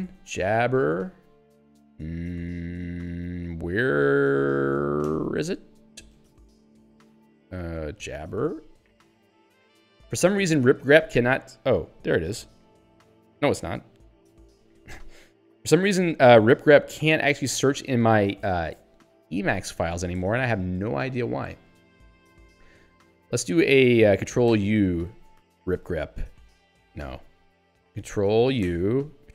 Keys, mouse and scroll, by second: 0.0-1.4 typing, 5.1 ctrl+g, 7.3 ctrl+f, 7.7-9.2 typing, 14.7 ctrl+p, 18.0 ctrl+g, 20.3 ctrl+g, 24.5 ctrl+u, 25.6 ctrl+f, 27.1 ctrl+g, 28.7 ctrl+u.